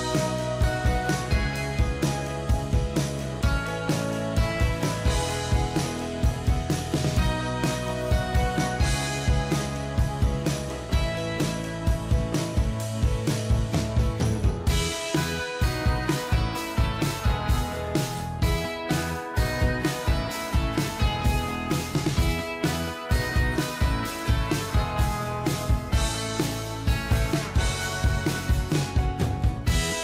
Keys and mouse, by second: 1.1 right click, 7.3 click, 13.7 0, 14.1 Return, 18.5 ctrl+click, 22.2 ctrl+click, 27.9 ctrl+t.